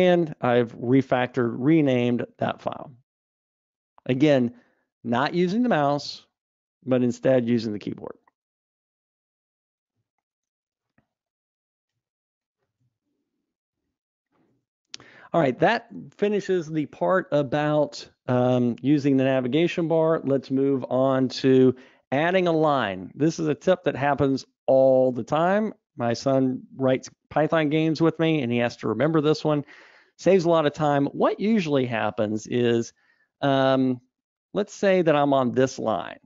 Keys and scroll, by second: 2.0 super+Up, 8.8 Escape, 11.3 super+Up.